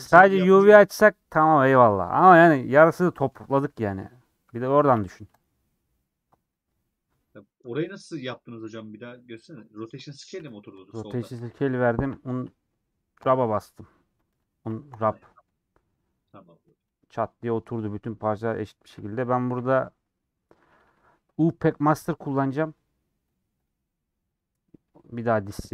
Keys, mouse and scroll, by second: 3.0 middle click, 3.7 Tab, 6.4-10.1 middle drag, 10.1 Tab, 18.0-19.6 middle drag, 19.6 n, 25.4 a.